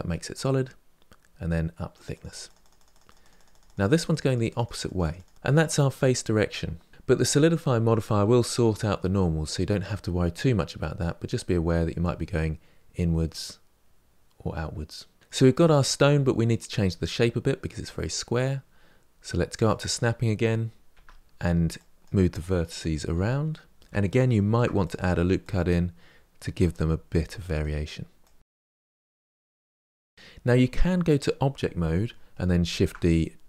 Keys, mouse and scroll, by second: 1.8 Left, 1.8-6.9 drag, 2.0-3.8 Left, 3.9 Left, 4.1 Left, 6.9 middle drag, 11.9-14.9 drag, 15.2-16.8 middle drag, 16.8-17.7 scroll down 3, 17.7-19.5 scroll up 5, 19.5 click, 20.8 Tab, 21.2 Tab, 21.4 click, 22.1 g, 22.8 click, 23.0 g, 23.6 middle click, 24.3 ctrl+r, 24.7 click, 25.3 g, 26.1 click, 26.4 g, 27.2 middle click, 28.2 click, 28.4 g, 30.4 Tab, 32.7 shift+d.